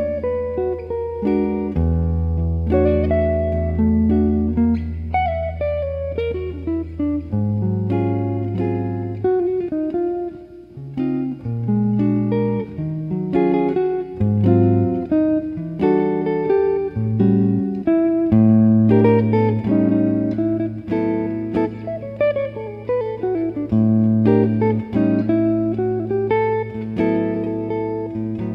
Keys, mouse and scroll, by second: 10.1-12.1 middle drag, 11.5 ctrl+r, 15.0-18.7 middle drag, 18.7 ctrl+e, 26.9 middle click, 27.1 click, 27.9 z.